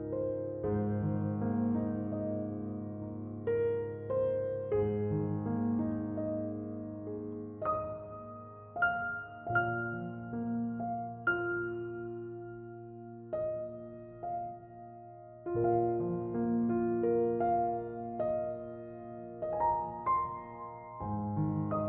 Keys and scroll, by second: 2.0 1, 2.4 0, 2.6 Return, 8.9 2, 9.6 Return, 16.3 2, 16.6 Return.